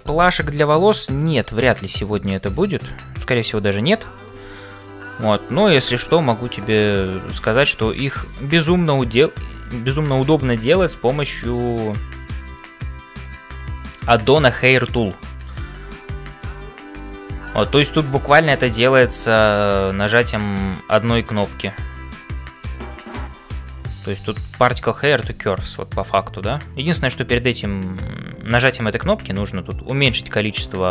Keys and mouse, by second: 0.0-30.9 typing, 3.4 click, 7.2 click, 10.9 Tab, 11.7 click.